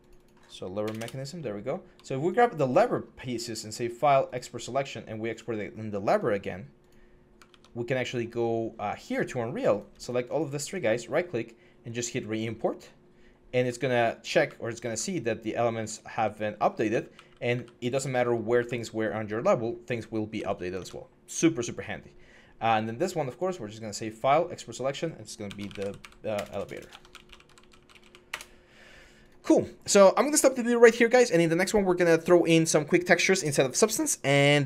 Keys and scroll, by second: 0.6 BackSpace, 0.8 Return, 7.3 alt+Tab, 8.8 alt+Tab, 14.2-18.3 typing, 20.5 alt+Tab, 25.3-28.2 typing, 26.3 F12.